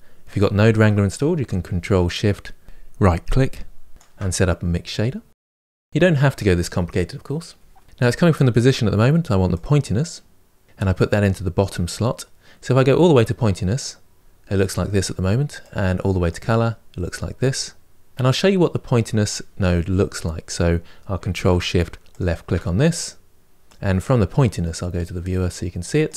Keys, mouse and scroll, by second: 2.7-4.3 ctrl+shift+right drag, 4.3 click, 4.9-10.6 drag, 12.5-18.1 drag, 18.1-21.9 middle drag, 21.9 ctrl+shift+click, 23.5 click.